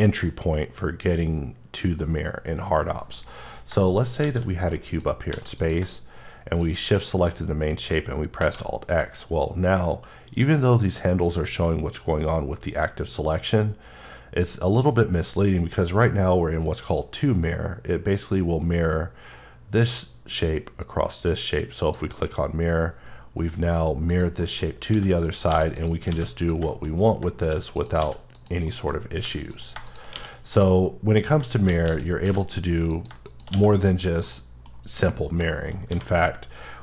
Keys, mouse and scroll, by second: 4.0 shift+right click, 4.2 shift+a, 4.9 click, 5.3 s, 5.6 click, 8.4 alt+x, 21.8 click, 23.4 right click, 24.1 click, 24.9 s, 25.2 click, 25.5 g, 25.8 click, 26.1 s, 26.4 click, 26.7 middle click, 26.9 scroll up 1, 27.4 shift+d, 27.8 click, 28.0 s, 28.3 click, 28.7 middle click, 29.2 g, 29.5 click, 30.1 q, 30.5 click, 30.8 middle click, 31.6 shift+d, 31.9 x, 32.2 y, 32.3 h, 32.9 click, 33.2 double click, 33.5 q, 33.8 click, 34.2 middle click, 34.7 scroll down 1, 35.5 shift+middle click, 35.9 a.